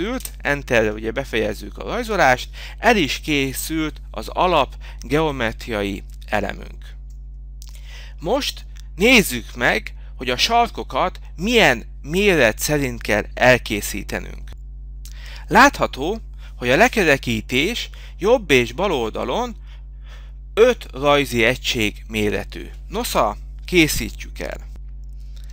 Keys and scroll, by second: 7.3 5, 16.6 t, 17.4 Return, 21.6 Return, 24.4 Return.